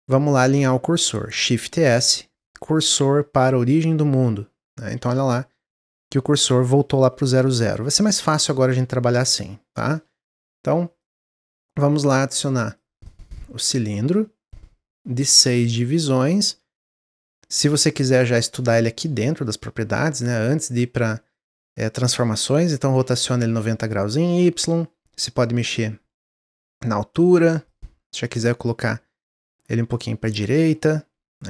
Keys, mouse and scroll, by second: 1.5 shift+s, 7.4 middle click, 7.6 scroll up 1, 8.0-10.9 shift+middle drag, 10.9-12.2 drag, 12.5-15.6 drag, 19.3-24.2 drag, 25.6-30.1 drag, 30.1-31.4 middle drag.